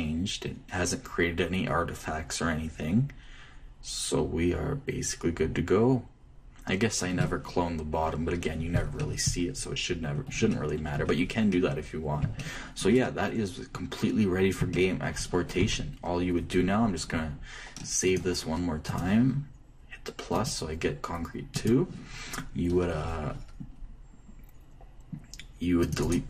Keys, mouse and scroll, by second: 9.7-13.2 middle drag, 11.0 Left, 16.3 t, 18.8 click, 22.4-24.0 drag.